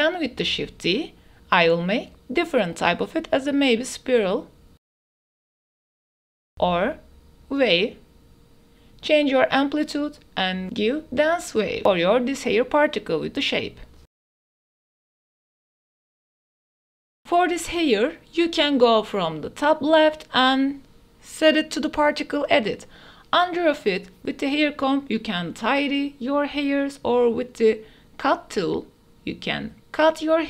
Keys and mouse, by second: 0.9-3.4 drag, 4.5 ctrl+s, 5.0 click, 6.0 click, 6.8 click, 7.2-7.7 drag, 8.2-10.4 drag, 10.9-12.1 drag, 12.4 click, 14.0 click, 14.5 click, 15.1-16.7 drag, 16.9 ctrl+s, 17.0 a, 17.2 click, 17.9 ctrl+s, 19.8 ctrl+s, 21.4-22.6 drag, 23.7-24.3 drag, 24.3 middle click, 24.8-29.5 middle drag, 29.8-30.3 middle drag.